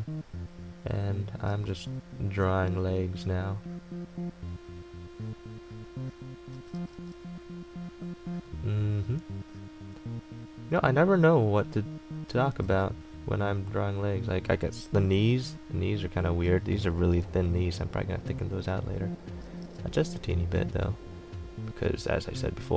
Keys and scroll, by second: 1.7 ctrl+z, 12.5 ctrl+z.